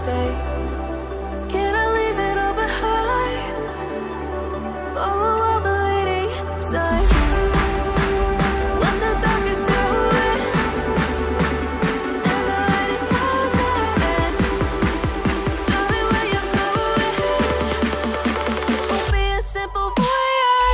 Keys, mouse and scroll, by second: 5.2 ctrl+click, 11.7 ctrl+shift+click, 13.8 ctrl+z, 14.3 ctrl+shift+click, 15.9 ctrl+shift+click, 18.3-19.8 ctrl+scroll up 1, 20.6 ctrl+click.